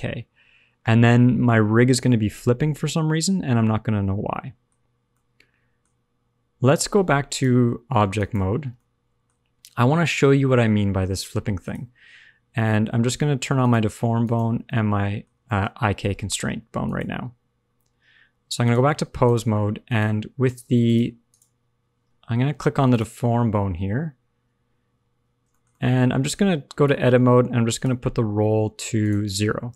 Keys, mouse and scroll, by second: 4.7-5.0 scroll up 2, 5.0 shift+middle click, 7.2 click, 8.7 middle click, 11.5 click, 13.6 click, 14.2 shift+click, 14.6 middle click, 15.4 shift+middle click, 15.5-16.6 shift+scroll up 2, 15.7 middle click, 16.8 click, 18.8 click, 19.8 click, 20.4 click, 20.8 click, 21.2 click, 22.8 click, 25.4 shift+middle click, 25.7 middle click, 26.8 Tab, 27.7 click, 29.0 click.